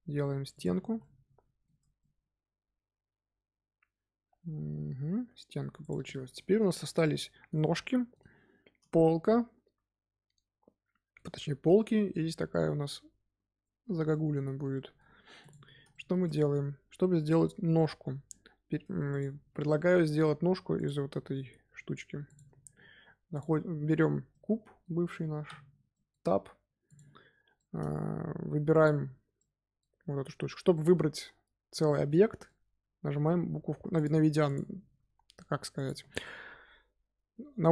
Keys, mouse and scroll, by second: 0.7 z, 0.9 middle click, 1.6 Tab, 1.9-5.1 middle drag, 5.7 click, 6.0-11.8 shift+middle drag, 14.0-15.3 shift+middle drag, 15.3 click, 15.8-17.9 shift+middle drag, 17.9 Tab, 18.7 Tab, 19.0 click, 19.2 scroll down 1, 19.5-20.1 middle drag, 20.1 scroll up 2, 20.7 click, 22.2 click, 23.3 click, 24.2-25.4 middle drag, 25.4 Tab, 25.8 middle click, 26.1 scroll down 1, 26.3-26.8 scroll up 2, 26.8 click, 27.5 shift+middle click, 27.8 scroll up 2, 28.6 click, 29.3-33.9 middle drag, 33.9 click, 34.4 click, 35.7 click.